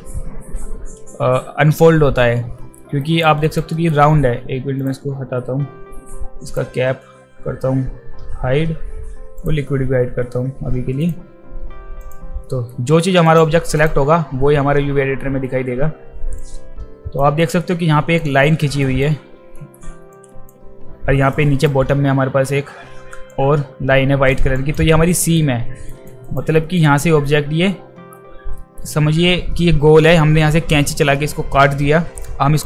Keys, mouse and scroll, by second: 2.6 alt+middle click, 3.0 alt+right click, 3.4 alt+right click, 3.7 alt+middle click, 4.8 click, 6.5 click, 9.4 click, 11.0 click, 12.0 click, 12.4 alt+middle drag, 13.3 click, 13.8 click, 16.4 alt+click, 17.4 alt+click, 18.8 alt+click, 19.6 alt+scroll up 2, 20.1 alt+click, 21.3 alt+right click, 23.3 alt+click, 24.3 alt+click, 24.6 alt+click, 25.1 alt+middle drag, 25.9 alt+right click, 26.3 alt+right click, 26.5 alt+middle click, 28.5 alt+middle drag, 32.2-32.6 alt+drag.